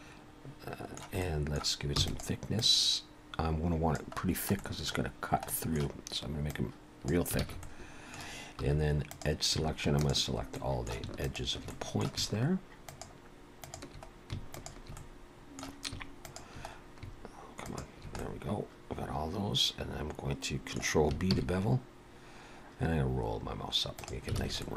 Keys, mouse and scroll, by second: 1.5 middle click, 2.0 e, 2.6 click, 4.2-4.9 scroll down 3, 4.6 middle click, 5.6 middle click, 6.5 click, 7.4 alt+a, 7.6 middle click, 8.6 2, 9.1 click, 10.0 shift+click, 10.6 middle click, 11.3 shift+click, 11.7 middle click, 12.9 shift+click, 13.9 shift+click, 14.7 shift+click, 15.0 middle click, 16.3 shift+click, 17.8 shift+click, 18.2 middle click, 21.4 ctrl+b, 24.4 alt+a, 24.6 middle click.